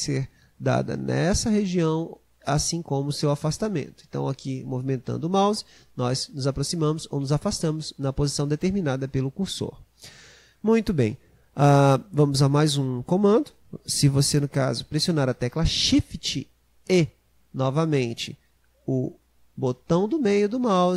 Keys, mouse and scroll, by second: 17.7-20.7 shift+middle drag.